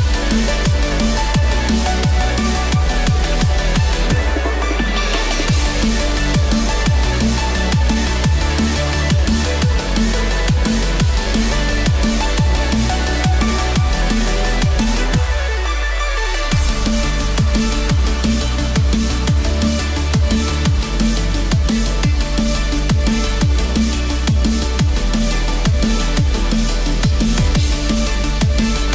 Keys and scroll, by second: 5.6 ctrl+z, 6.5 ctrl+z.